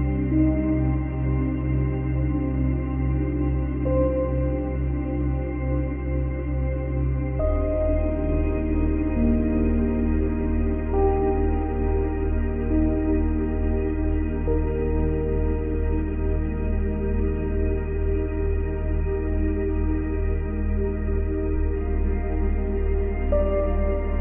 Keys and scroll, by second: 2.8 space, 3.6 space, 17.9 Delete.